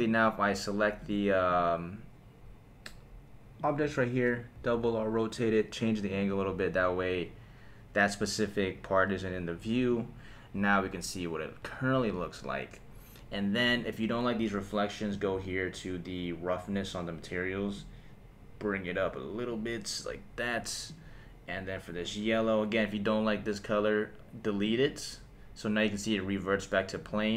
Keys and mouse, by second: 1.0 click, 1.5-3.7 right drag, 4.5 r, 4.7 r, 6.1 click, 9.9 click, 13.7 click, 15.1 click, 17.7-19.5 drag, 20.9 click, 24.6 click, 26.9 click.